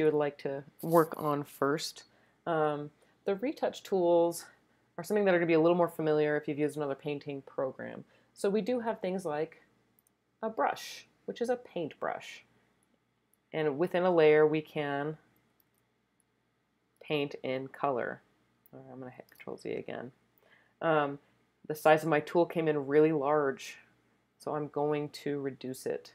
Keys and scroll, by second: 15.8 z, 19.4 z, 24.9 [, 25.2 [, 25.6 [, 25.9 [.